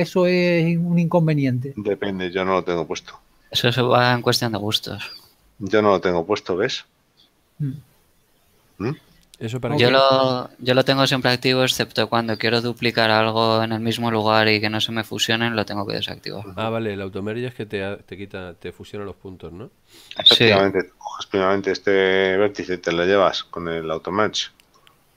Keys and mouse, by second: 22.3 right click, 24.9 click.